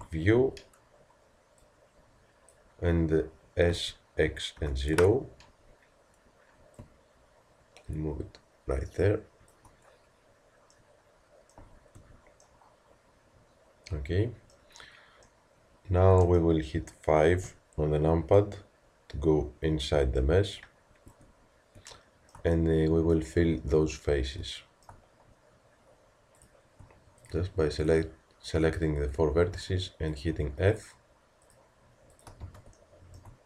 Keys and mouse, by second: 0.4 z, 1.6-10.8 drag, 10.8-15.3 middle drag, 11.6 z, 12.0 Tab, 15.3-17.4 drag, 15.4 middle click, 17.4 KP_5, 21.1 Tab, 26.4-29.6 drag, 29.6 f.